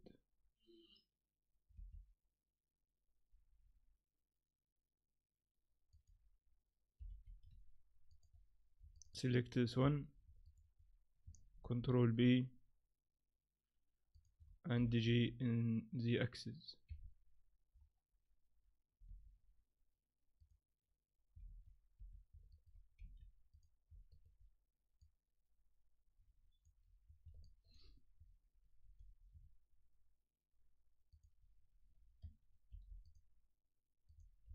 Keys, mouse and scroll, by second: 1.7 e, 7.0 g, 8.9 middle click, 9.1 middle click, 9.8 a, 10.4 alt+right click, 11.6 ctrl+b, 14.7 g, 19.0 scroll up 1, 19.0 x, 21.5 ctrl+z, 22.0 a, 22.5 alt+right click, 23.0 x, 24.1 alt+right click, 25.0 click, 27.0-27.4 scroll up 2, 27.4 shift+middle click, 28.8 ctrl+b, 32.7 ctrl+r, 34.4 ctrl+r.